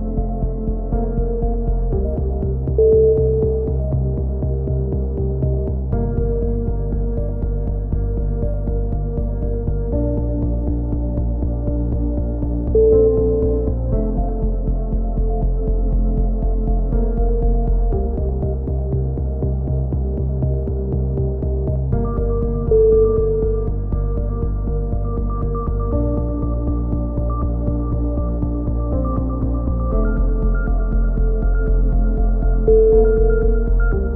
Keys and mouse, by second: 0.2 right click, 0.5 f, 0.7-2.2 right drag, 2.1 f, 2.2 a, 2.5-3.6 drag, 2.5 z, 3.2-7.2 right drag, 5.6 f, 6.5 f, 6.6 a, 7.3 click, 8.1-13.6 right drag, 12.0 f, 12.3 a, 13.6 click, 13.6 f, 13.7 a, 14.2 KP_7, 14.7 click, 15.4 a, 15.7 z, 15.8-17.0 drag, 18.9 KP_3, 19.2 z, 19.6 right click, 19.8 click, 20.5 a, 20.5 z, 21.0 click, 24.4-25.6 drag, 25.6 KP_3, 25.7 z, 26.2 KP_7, 26.5 click, 28.6 ctrl+r, 29.0 click, 29.4 right click, 30.0 g, 30.9 ctrl+r, 31.1 right click, 31.5 a, 32.1 click, 32.4 right click, 32.6 x, 33.0 click, 33.0 z, 33.7 right click.